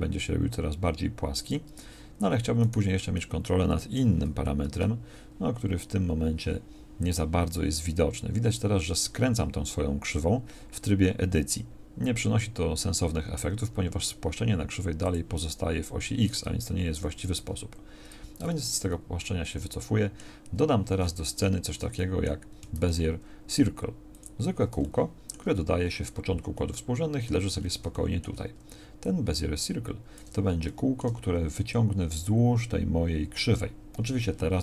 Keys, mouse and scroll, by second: 1.8 Tab, 16.7 ctrl+z, 17.4 Tab, 18.5 ctrl+z, 22.8 shift+a, 25.8 z.